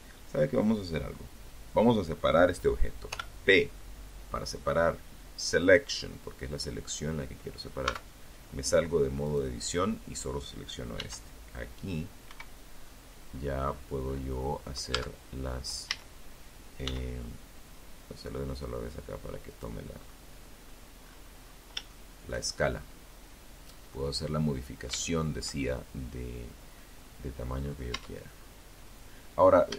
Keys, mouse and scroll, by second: 1.3 p, 3.8 click, 6.0 Tab, 7.4 right click, 9.1 s, 10.4 Escape, 10.9-11.7 scroll down 2, 11.8-12.5 scroll up 2, 12.7-13.1 scroll down 1, 13.1 Tab, 14.1 a, 15.0 s, 17.7 click, 18.1-18.5 scroll up 1, 18.7-19.1 scroll down 1, 19.2 scroll up 1, 19.6 scroll down 1, 20.0 shift+middle click, 20.7-21.1 shift+scroll up 1, 21.5 scroll down 1, 23.1 shift+middle click, 24.9-25.4 scroll down 1, 25.4 scroll down 1, 25.7-26.1 scroll up 1, 26.1 Tab, 26.1-27.2 scroll down 1, 27.7 scroll up 1, 28.1 shift+middle click.